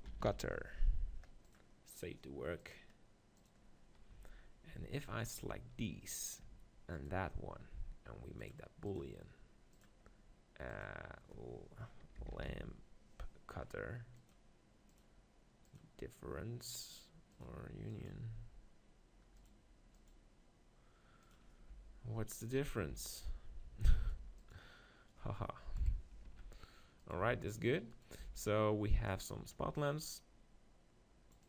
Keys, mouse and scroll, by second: 1.2 t, 2.8-4.3 drag, 4.1 z, 4.3-6.9 middle drag, 4.7 z, 6.9-14.3 drag, 6.9-9.1 right drag, 15.8-24.1 drag, 21.7 z, 22.3 right click, 22.8 g, 24.2 x, 25.8 KP_1, 26.2 Tab, 27.0-28.2 drag, 27.0 z, 27.0 x, 27.2 Tab, 28.2 b.